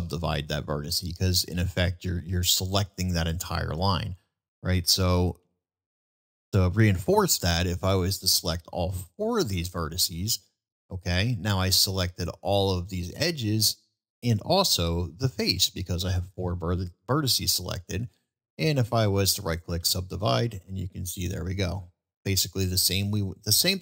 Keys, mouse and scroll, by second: 0.1-0.4 middle drag, 5.4 ctrl+z, 8.4 shift+click, 10.6-11.5 shift+middle drag, 14.9-15.6 middle drag, 20.7-22.0 middle drag, 22.8-23.1 middle drag.